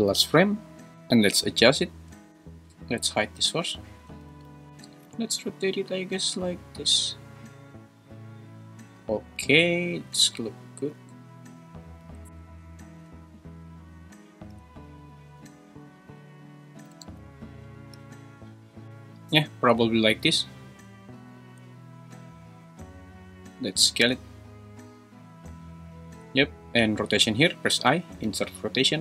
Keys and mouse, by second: 0.9 middle click, 1.3 middle drag, 1.3 `, 3.4-5.1 typing, 9.3 r, 10.6 click, 10.9 g, 11.6 click, 12.0 r, 13.0 g, 14.5 r, 15.4 g, 16.8 g, 17.0 x, 17.9 r, 21.3 s, 23.9 g, 27.8 i.